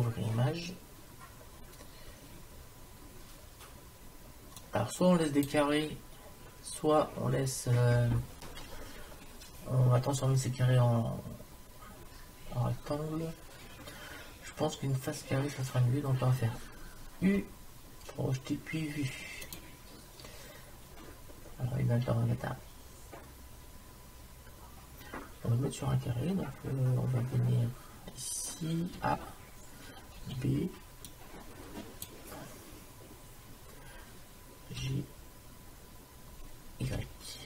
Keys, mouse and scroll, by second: 0.9-4.6 middle drag, 4.6 click, 6.4 click, 6.5-8.7 middle drag, 17.3 u, 21.1-25.6 middle drag, 21.1-22.0 scroll up 1, 22.0 scroll down 1, 27.4-30.2 middle drag, 29.0 a, 30.2 b, 34.8 g.